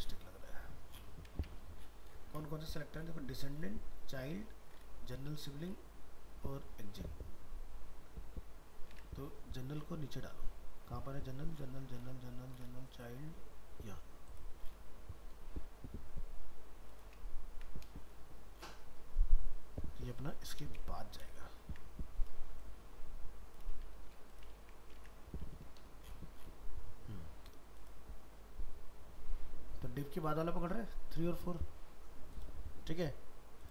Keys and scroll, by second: 1.4 alt+Tab, 8.9 alt+Tab, 17.5 ctrl+x, 21.6 ctrl+s, 25.0 alt+Tab.